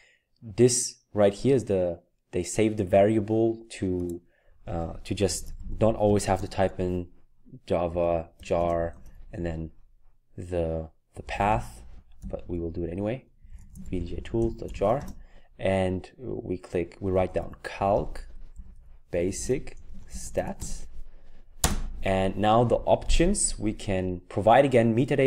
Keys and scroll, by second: 5.1-6.4 typing, 7.6-9.0 typing, 11.0-15.3 typing, 16.9-22.1 typing.